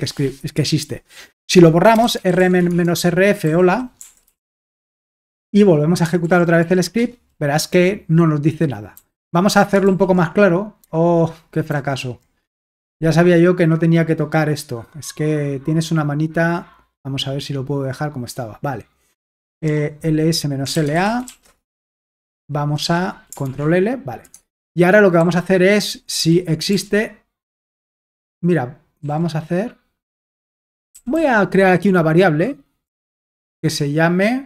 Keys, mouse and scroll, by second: 1.7-4.9 typing, 6.2 ctrl+p, 6.6 ctrl+p, 7.0 Return, 8.9 typing, 9.9 super+l, 11.8 super+h, 14.9-16.5 drag, 16.9-20.6 drag, 19.5-22.6 typing, 23.5 ctrl+l, 24.4 alt+Tab, 25.0-26.7 typing, 27.8 Escape, 30.9 typing, 33.1 typing.